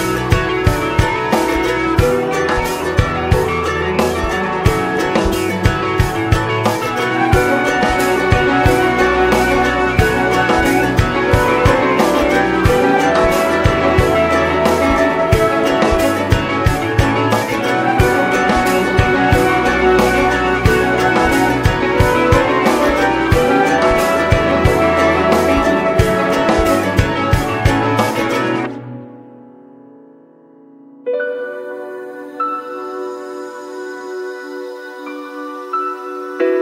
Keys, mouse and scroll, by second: 0.3 click, 0.6 middle click, 1.2 click, 2.3 middle click, 2.5-3.2 scroll down 4, 3.2-7.2 middle drag, 7.2 click, 8.0 scroll down 1, 8.0 middle click, 8.8-9.1 scroll up 1, 9.1 middle click, 9.3 ctrl+scroll up 1, 9.6 ctrl+s, 9.9 shift+middle click, 10.1-10.4 scroll up 1, 10.4 ctrl+s, 10.7 click, 10.9-12.6 shift+middle drag, 11.7 ctrl+s, 12.5 click, 13.1 shift+click, 13.7 ctrl+a, 14.8 ctrl+a, 15.0 click, 15.2 ctrl+s, 15.5 click, 16.1 right click, 16.7-17.7 drag, 17.8-19.9 right drag, 19.9 click, 21.5-26.2 drag, 27.2 middle click, 28.0 space, 29.5 space, 30.2 click, 30.5 space, 31.2 space, 32.6 click, 33.0 click, 33.3 middle click, 33.9 click, 35.0-36.6 drag.